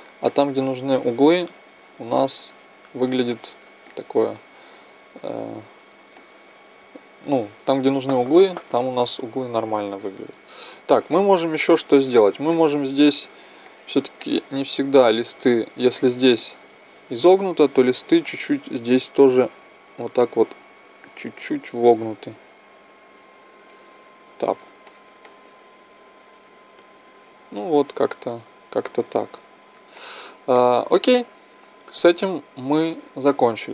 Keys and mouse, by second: 10.2 Tab, 11.9-12.7 drag, 11.9-12.7 middle drag, 11.9-12.7 right drag, 13.1 click, 13.1 middle click, 13.1 right click, 13.5 drag, 13.5 middle drag, 13.5-13.8 right drag, 13.8 middle click, 19.5 click, 24.2 Tab, 24.8-26.5 middle drag, 29.9-33.7 drag.